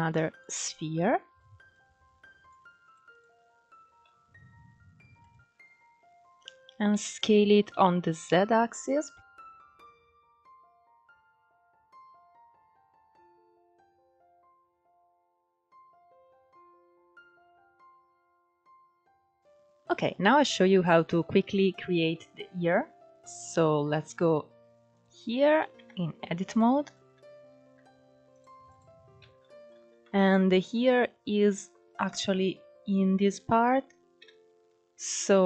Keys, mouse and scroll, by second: 1.4 click, 2.5-3.5 right drag, 3.5 s, 5.2-5.7 scroll up 4, 5.7-6.6 scroll down 1, 6.6 s, 10.0-10.4 scroll up 2, 10.1 shift+middle drag, 11.6-12.3 scroll up 1, 12.3 r, 13.2 s, 14.3 ctrl+z, 14.5 ctrl+z, 14.9 s, 15.6 r, 16.6 g, 17.2 s, 18.3 scroll down 3, 18.4 middle click, 18.9 click, 19.0 scroll down 1, 19.1 middle click, 21.4-22.1 scroll up 1, 22.1-22.9 middle drag, 22.9 KP_1, 23.6-24.0 scroll down 4, 24.0 shift+middle drag, 24.3 scroll up 3, 24.6 click, 25.4 Tab, 26.2 shift+middle click, 26.6 scroll up 2, 28.3 click, 28.8 alt+z, 29.5 scroll down 1, 29.7 shift+middle click, 30.1 scroll up 2, 34.7 ctrl+3, 35.3 click.